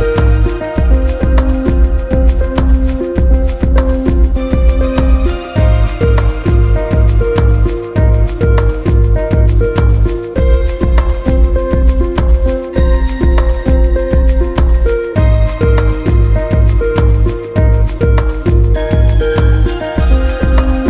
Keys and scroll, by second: 0.0 ctrl+alt+space, 1.7 ctrl+alt+space, 2.2 ctrl+space, 3.3 ctrl+z, 4.1 ctrl+space, 6.7 ctrl+alt+space, 7.4 ctrl+space, 8.7 ctrl+alt+space, 9.7 ctrl+space, 10.5 ctrl+alt+space, 11.3 ctrl+z, 12.6 ctrl+alt+space, 13.5 ctrl+c, 14.1 ctrl+f, 15.6 ctrl+alt+space, 17.1 ctrl+alt+space, 18.8 ctrl+space.